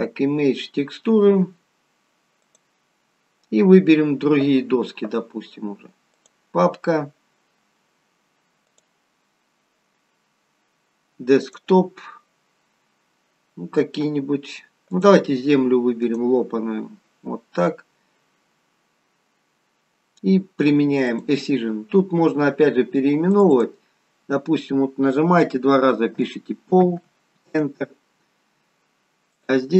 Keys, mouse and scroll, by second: 7.5 click, 8.7 click, 19.5-19.9 scroll up 7, 21.1 click, 23.3 click, 24.4 click, 29.4 click.